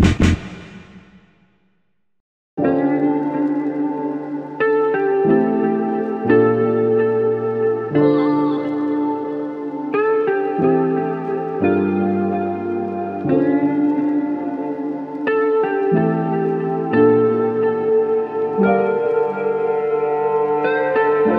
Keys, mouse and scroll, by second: 10.9 ctrl+Tab, 15.6 typing.